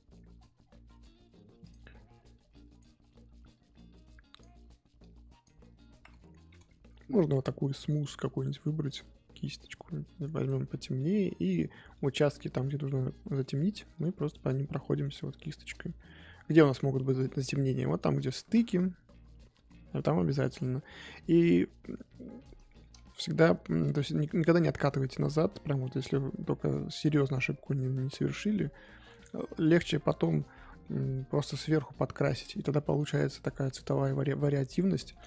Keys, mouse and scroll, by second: 7.3 ctrl+z, 10.4 click, 10.9-11.9 scroll up 2, 11.9-13.0 drag, 13.0 middle click, 13.9 click, 14.7-17.7 middle drag, 17.7 click, 18.4 ctrl+z, 18.7-20.7 drag, 20.7 middle click, 21.4-22.6 drag, 22.6 shift+middle click, 23.3-23.9 scroll up 2, 23.9 click, 24.6-25.2 scroll down 1, 25.2-27.9 drag, 27.9 middle click, 28.8 click, 29.4 ctrl+z, 29.8 click, 30.6 middle click, 31.1 click, 32.1 middle click, 32.6-33.1 scroll down 3, 33.1-35.2 middle drag.